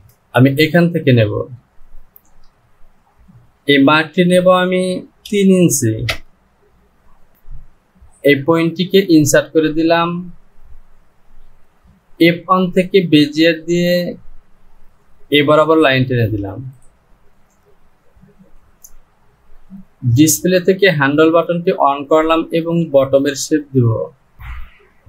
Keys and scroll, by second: 0.0 ctrl+z, 4.3 Down.